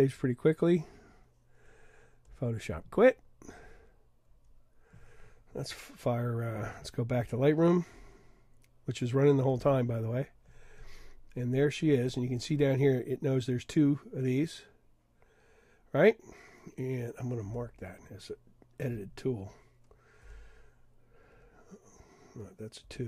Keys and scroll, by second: 17.6 3, 20.3 1, 21.5 1, 22.9 2.